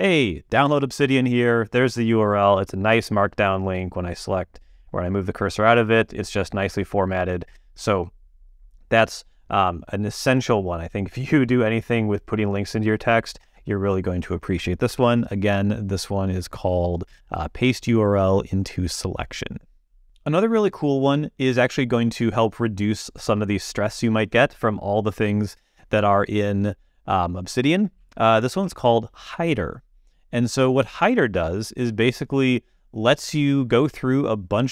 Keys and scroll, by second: 14.9 super+,.